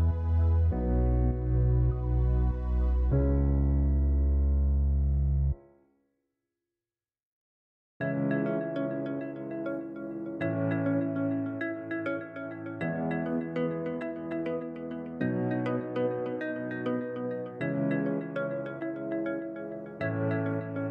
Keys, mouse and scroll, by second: 10.2 click, 15.3 KP_0, 17.7-20.9 drag.